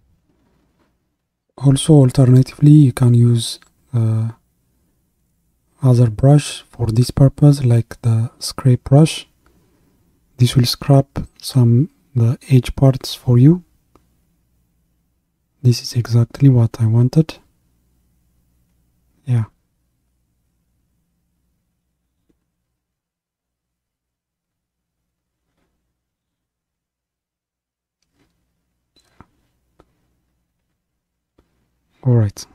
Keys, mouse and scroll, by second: 7.7 click, 8.3-9.2 scroll up 1, 9.2-12.3 drag, 16.0-17.1 middle drag, 17.1-20.2 drag, 23.1-23.5 scroll down 1, 23.5-25.8 middle drag, 25.8-28.9 drag, 32.1-32.5 scroll down 1.